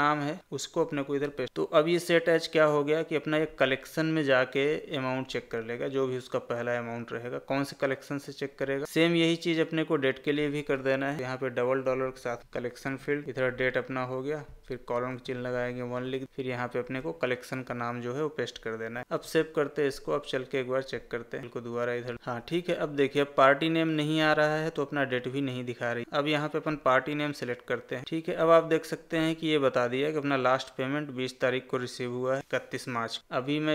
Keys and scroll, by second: 1.2 ctrl+v, 12.4 Tab, 16.8 ctrl+v, 19.2 ctrl+s, 28.0 ctrl+a.